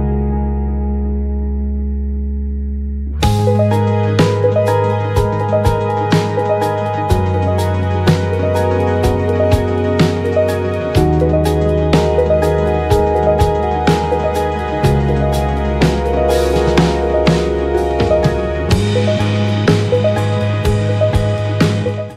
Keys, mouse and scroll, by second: 1.4-2.5 drag, 3.0-5.3 drag, 4.7-7.2 typing, 6.6-8.0 right drag, 7.8 click, 7.8 middle click, 9.3 right click, 10.7 KP_1, 12.6-14.0 right drag, 14.0 middle click, 14.8 right click, 15.3-22.1 middle drag.